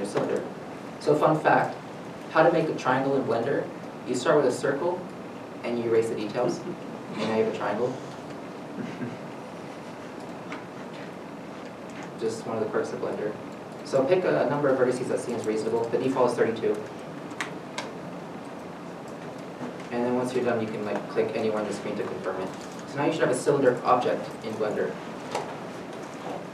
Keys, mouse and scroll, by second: 6.9 F9, 6.9 middle click, 9.0 ctrl+z, 15.2 3, 15.3 3, 18.2 middle click, 20.4 middle click, 20.4 Return, 24.6 middle click.